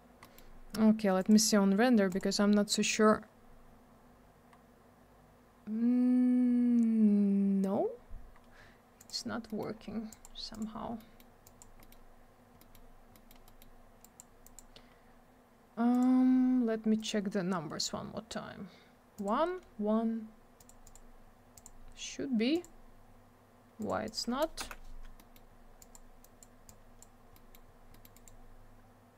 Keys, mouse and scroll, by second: 0.2 middle click, 0.3 middle click, 1.2 click, 1.3 click, 2.1 click, 2.2 click, 3.4-3.8 scroll up 1, 4.5-5.7 scroll down 1, 7.8-8.3 scroll up 1, 8.3-8.8 scroll down 1, 9.0 click, 9.1 click, 9.5 middle click, 9.6 scroll down 1, 9.6 middle click, 9.7-10.1 scroll up 1, 10.1 click, 10.2 click, 10.5 click, 10.6 double click, 11.0 middle click, 11.2 middle click, 11.4 click, 11.6 double click, 11.8 middle click, 11.9 middle click, 12.6 middle click, 12.7 middle click, 13.1 middle click, 13.3 middle click, 13.5 middle click, 13.6 double middle click, 14.0 click, 14.2 click, 14.4 click, 14.6 double click, 15.9 click, 16.0 click, 17.0 click, 17.1 click, 19.2 click, 19.3 click, 20.6 click, 20.7 click, 20.8 click, 20.9 click, 21.5 click, 21.6 click, 22.5 click, 22.6 click, 23.8 click, 23.9 click, 24.0 click, 24.1 click, 24.6 m, 25.2 middle click, 25.3 middle click, 25.5 scroll up 1, 25.8 click, 25.9 click, 26.2 click, 26.4 double click, 26.7 click, 27.3 middle click, 27.5 middle click, 27.9 middle click, 28.0 middle click, 28.1 right click, 28.2 right click.